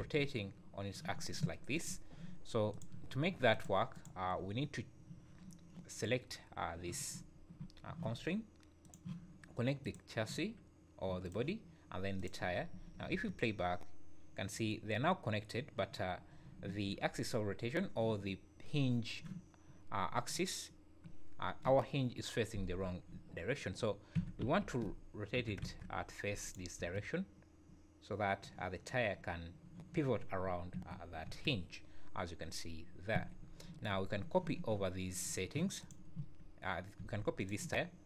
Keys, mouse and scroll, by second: 2.7 click, 3.5 click, 8.8 click, 11.2 click, 12.5 scroll down 4, 12.7 `, 13.1 space, 16.6 Escape, 24.1 r, 26.7 space, 30.7 Escape, 31.2 space, 33.1 Escape, 34.0-34.3 scroll up 3, 35.2 `, 35.8 click, 36.9 x.